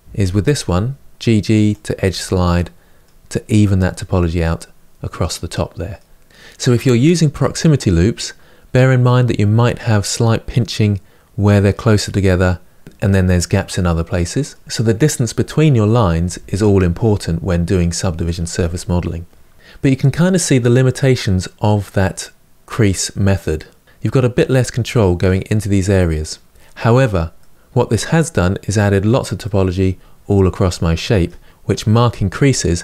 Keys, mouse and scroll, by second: 1.8 Tab, 2.3-6.3 middle drag, 6.3-11.7 scroll down 1, 11.7-13.6 scroll down 1, 13.6-26.5 middle drag, 26.5-27.1 scroll down 1, 27.1-32.8 middle drag.